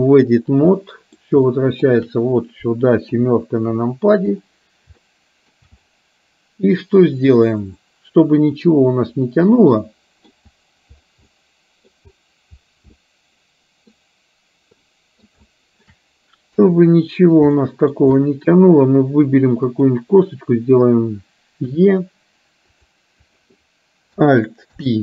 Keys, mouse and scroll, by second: 0.7 middle click, 1.6 shift+middle click, 3.1 KP_7, 5.1 shift+middle click, 9.7 middle click, 11.4 middle click, 13.0-14.0 middle drag, 14.9 middle click, 15.5 shift+middle click, 16.6 KP_3, 17.6 shift+middle click, 19.9 click, 22.7 e, 23.4 click, 24.7 alt+p.